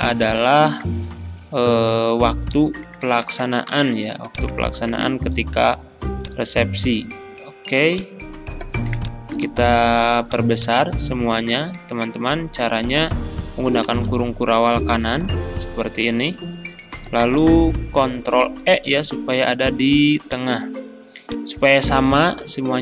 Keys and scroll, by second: 1.0 ctrl+v, 2.6 ctrl+z, 3.3 ctrl+c, 4.7 ctrl+a, 5.4 ctrl+v, 9.5 ctrl+a, 13.8 ctrl+], 18.4 ctrl+e.